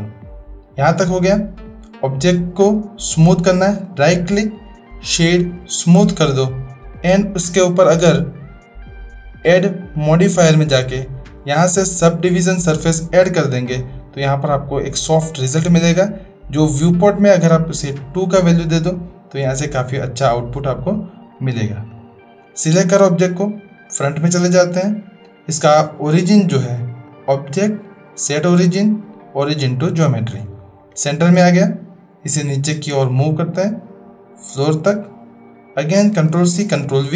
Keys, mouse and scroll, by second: 1.0 Tab, 3.8-5.8 middle drag, 8.9 click, 10.0-13.2 drag, 18.1 click, 21.9 click, 22.4 click, 27.2-29.8 drag, 31.0 shift+drag, 32.3-34.9 drag, 36.3 ctrl+c.